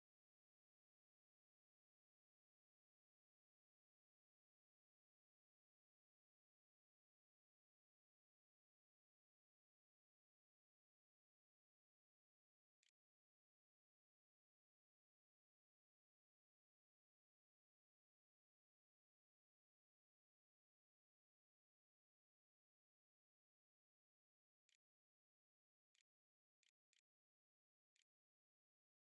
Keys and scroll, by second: 1.2 o, 11.1-14.8 typing, 12.6 Return, 23.4-29.1 typing, 27.6 Tab.